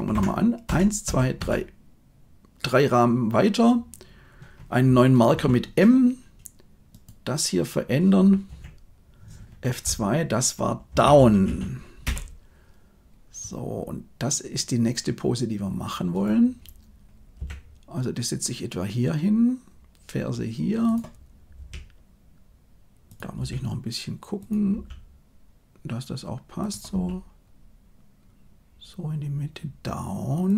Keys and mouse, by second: 0.1 Left, 0.6 Right, 1.0 Right, 1.3 Right, 5.3 m, 6.9 click, 8.4 F2, 17.3 g, 21.5 r, 23.4 g, 24.7 r, 26.9 g.